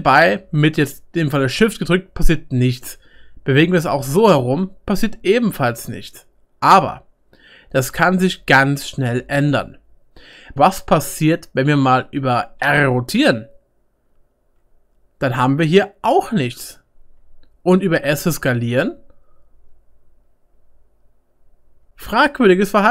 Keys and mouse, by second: 3.5 middle click, 4.4 middle click, 4.9 middle click, 5.1 middle click, 5.3-9.4 middle drag, 6.4 click, 6.4 right click, 6.6 click, 6.6 right click, 7.3 click, 7.3-22.9 right drag, 10.0-13.7 shift+middle drag, 12.6 r, 14.8 middle click, 15.6-16.7 middle drag, 17.7 s, 18.6-19.6 middle drag.